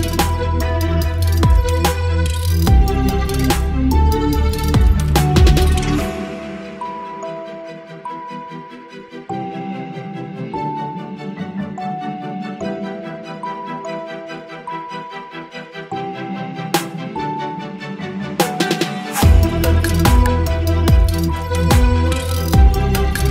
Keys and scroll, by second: 0.2 ctrl+z, 0.4 [, 2.5 space, 3.0 [, 3.5 ctrl+z, 4.0 ctrl+z, 4.6 space, 5.3 space, 5.4 ctrl+z, 5.9 space, 6.5 space, 7.9-10.8 typing, 10.7 ctrl+z, 11.3 ctrl+z, 11.7 ctrl+z, 12.0 space, 13.4 space, 14.2 ctrl+z, 14.5 space, 17.7 space, 18.7 ctrl+space, 19.0 ctrl+e, 22.8 ctrl+o.